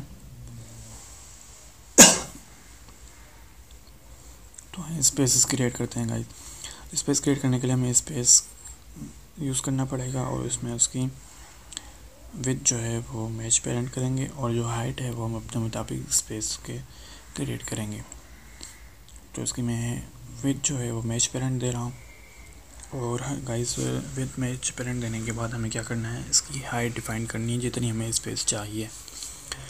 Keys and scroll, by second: 29.4 ctrl+Left.